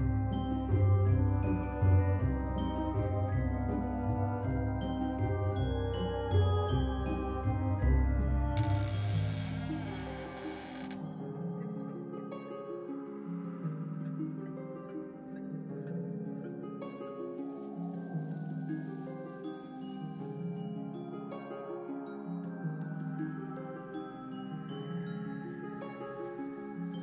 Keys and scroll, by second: 3.9 Return, 4.4-6.8 typing, 7.3 Left, 8.3 s, 8.9 Delete, 9.2 Return, 9.8 ctrl+s.